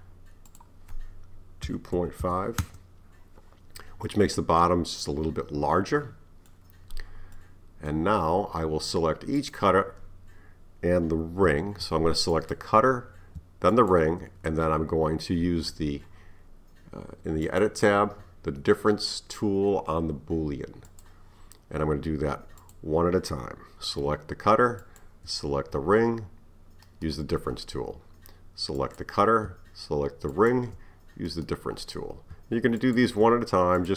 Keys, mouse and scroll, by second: 4.1-7.1 middle drag, 7.4-9.4 middle drag, 9.4 click, 12.4 click, 13.7 shift+click, 17.5 click, 20.9 click, 22.6 click, 24.8 shift+click, 28.8 click, 30.3 shift+click, 32.8 shift+click, 33.8 click.